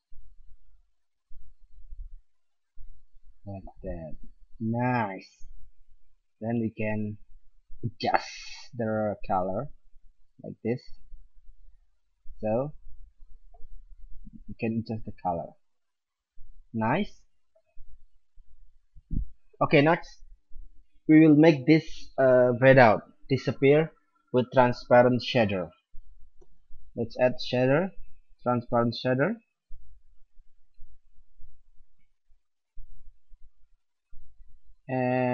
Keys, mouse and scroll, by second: 3.7-5.8 middle drag, 7.2-11.1 drag, 12.7 middle click, 18.8 middle click, 26.4 shift+a, 33.5-35.3 drag.